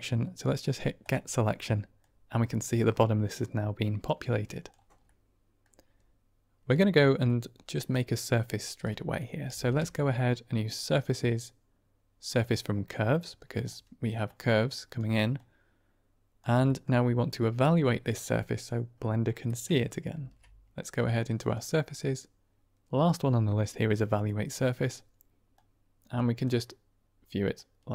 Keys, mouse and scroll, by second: 0.9 click, 1.9-4.6 drag, 5.1 middle click, 6.7 middle click, 7.2-8.2 middle drag, 9.4 shift+a, 14.2-14.9 drag, 15.3-16.3 drag, 16.5 middle click, 17.2-18.6 drag, 19.0 middle click, 20.0 shift+a, 25.4-26.0 drag, 26.4-27.6 drag.